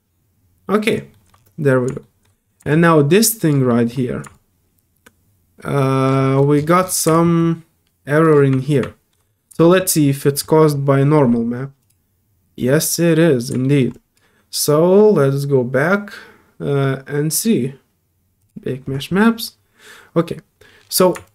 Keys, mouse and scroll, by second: 1.1 alt+middle click, 1.4 alt+middle click, 2.1 alt+middle click, 2.4 alt+middle click, 2.7 alt+click, 3.7 alt+middle click, 4.3-6.0 alt+drag, 6.2 alt+middle click, 6.5-6.9 scroll down 2, 7.1-8.3 alt+drag, 8.8 alt+middle click, 9.3 scroll up 1, 9.6 alt+middle click, 11.8 alt+click, 13.6 middle click, 13.9 alt+click, 18.4 click, 21.2-21.3 alt+drag.